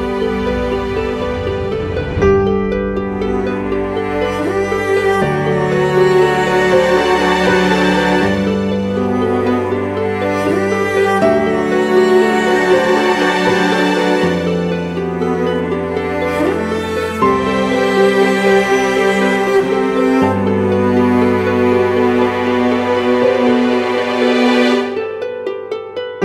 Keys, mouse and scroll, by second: 2.0 typing, 11.2-12.1 typing, 21.6 ctrl+t, 23.8 alt+shift+Left.